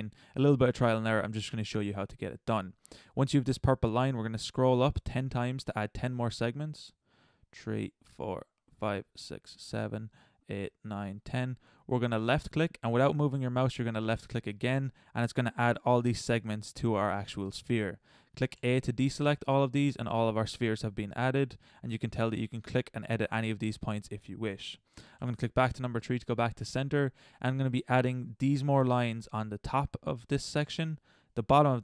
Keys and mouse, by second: 18.5 a, 20.5-22.0 drag, 25.2 KP_3.